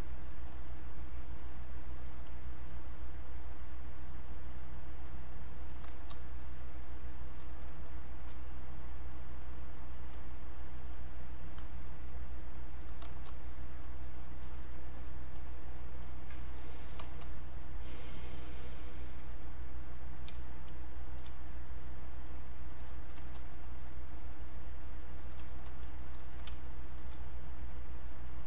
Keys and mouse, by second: 6.5 click, 7.7 space, 8.0 click, 8.1 space, 8.5 click, 9.5 space, 9.9 click, 10.0 space, 10.2 click, 13.9 click, 18.0 click, 20.3 space, 20.7 click, 20.9 space, 21.6-23.8 drag, 23.8-25.8 drag, 25.8 click, 26.5 space, 27.0 click, 27.0 space, 27.5 click, 28.3 click.